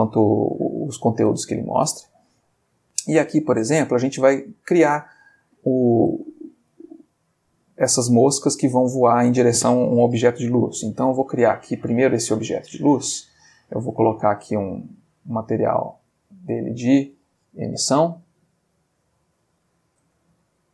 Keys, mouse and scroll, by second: 1.3 alt+Tab, 3.1-4.1 middle drag, 5.6 click, 6.3 shift+middle click, 8.8 x, 9.1 click, 10.3 shift+a, 11.8 click, 12.5 g, 13.0 click, 14.4 click, 15.1 click, 16.1 click, 17.8 click, 19.4-20.5 drag, 20.1 Escape.